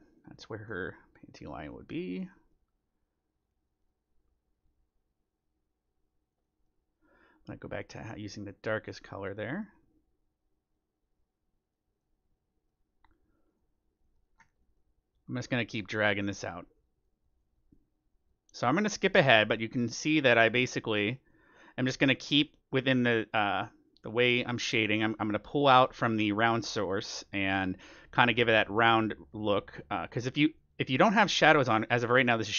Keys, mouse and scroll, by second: 1.3 click, 1.5-3.2 drag, 3.1 middle click, 3.4-6.4 drag, 6.4-8.2 middle drag, 7.4-10.4 drag, 9.4-11.1 middle drag, 10.7-12.5 drag, 12.0-13.6 middle drag, 13.4-15.1 drag, 14.3-18.0 middle drag, 16.1-27.4 drag, 18.7-20.5 middle drag, 21.8-23.4 middle drag, 26.0-29.5 middle drag, 28.5-32.5 drag, 31.9-32.5 middle drag.